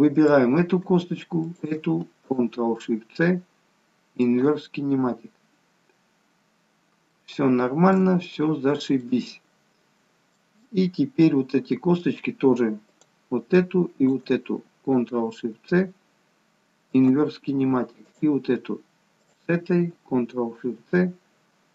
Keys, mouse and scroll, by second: 0.2 click, 1.5 shift+click, 2.9 ctrl+shift+c, 6.6 scroll down 1, 7.1 shift+middle click, 8.5-9.0 scroll up 1, 9.0 middle click, 12.8 click, 14.0 shift+click, 17.0 ctrl+shift+c, 18.0 click, 19.2 shift+click.